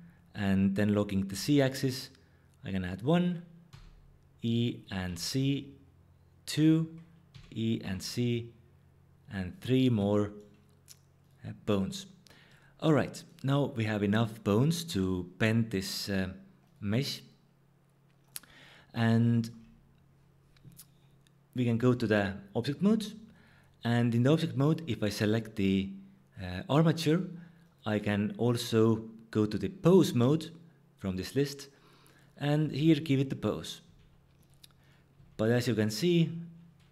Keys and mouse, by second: 1.3 z, 3.0 click, 3.7 e, 5.0 z, 6.5 click, 7.3 e, 7.8 z, 9.5 click, 11.2-12.5 drag, 16.6 click, 21.9 Tab, 24.6 click, 27.6-31.1 drag, 32.1 click, 32.6 r, 33.0 click, 33.8 r, 34.8 click, 35.1 r, 35.6 click.